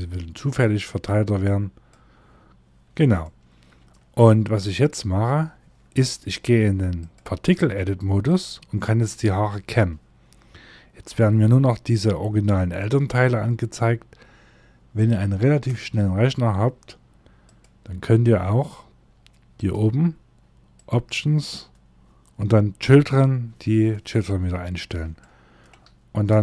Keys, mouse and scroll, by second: 2.7 shift+middle click, 3.7 middle click, 6.4 click, 15.1 click, 23.7 middle click, 24.7 shift+middle click, 26.3 click.